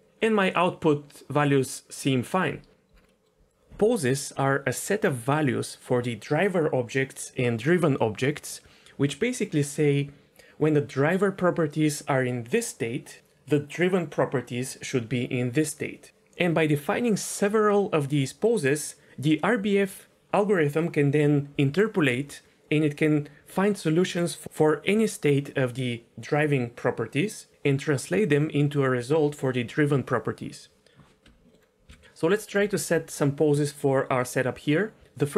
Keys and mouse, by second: 3.1 middle click, 31.4 middle drag, 31.9 n.